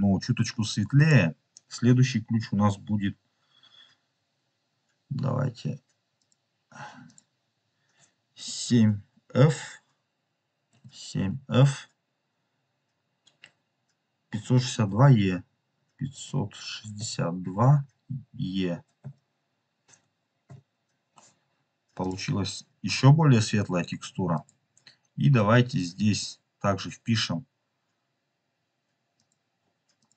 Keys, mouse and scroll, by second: 0.9 click, 6.1 click, 24.3 click, 29.0 click.